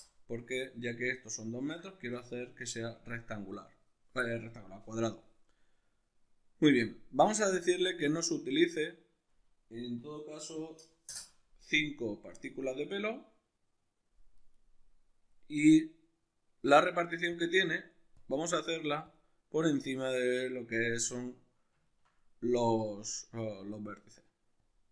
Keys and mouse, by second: 1.5-7.6 ctrl+middle drag, 7.6-14.6 drag, 11.2 Return, 14.6-17.4 middle drag, 17.4-21.2 drag, 21.2-24.6 middle drag, 24.6 click.